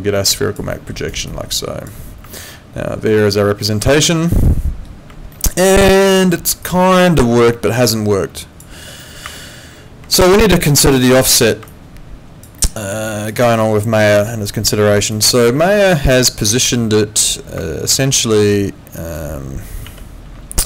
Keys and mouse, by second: 0.3 click, 0.7 middle click, 1.0 right click, 1.3 click, 2.4 middle click, 3.8 middle click, 5.3 middle click, 6.6 click, 10.1 alt+click, 10.8 alt+right click, 11.1 alt+middle click, 11.7 alt+click, 12.6 alt+middle click, 13.0 alt+click, 13.4 alt+middle click, 13.6 alt+right click, 14.4 alt+click, 17.9 ctrl+2.